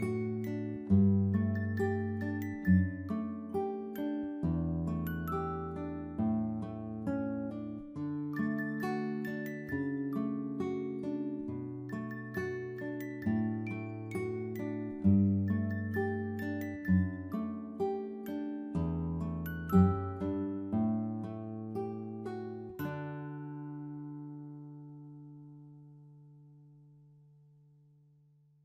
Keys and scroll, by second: 14.7-16.2 typing, 19.2-20.6 typing, 27.7 ctrl+-.